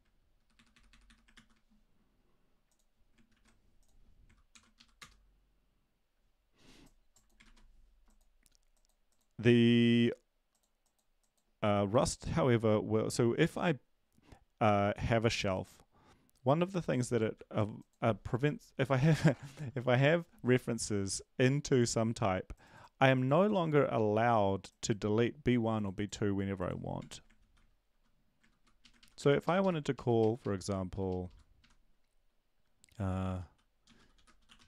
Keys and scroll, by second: 0.4 Delete, 0.5 Delete, 0.7 Delete, 1.3 Delete, 1.3 ctrl+s, 4.5 ctrl+l, 4.8 Up, 5.0 Return, 7.4 ctrl+`, 17.3 ctrl+c, 27.0 Tab, 27.4 ctrl+v, 28.4 ctrl+Left, 28.5 ctrl+Left, 28.8 Right, 29.4 ctrl+Left, 29.6 ctrl+Left, 29.9 Up, 30.2 Right, 31.6 ctrl+Right, 33.0-34.6 typing.